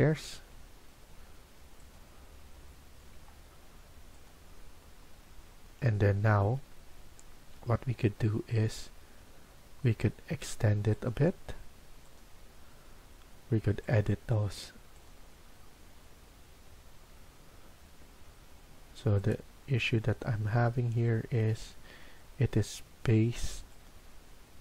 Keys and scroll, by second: 0.0 Escape, 0.3 Escape, 18.0 Escape, 18.7 Escape.